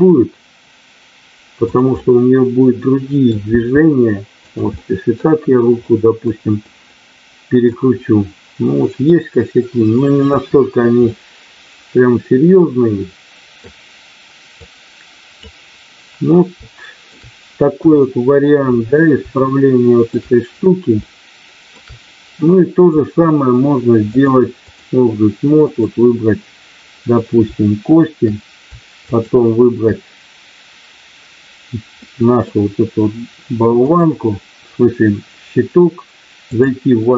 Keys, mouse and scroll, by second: 2.0-3.2 middle drag, 3.5 r, 4.3 click, 4.8 middle click, 5.7 middle click, 6.6 middle click, 9.1-10.2 middle drag, 11.1-13.6 middle drag, 14.6 click, 16.6 shift+middle click, 17.8 KP_1, 19.3 shift+middle click, 21.1 shift+middle click, 24.2 click, 25.6 click, 29.1 shift+click, 31.9 middle click, 33.8-36.7 drag.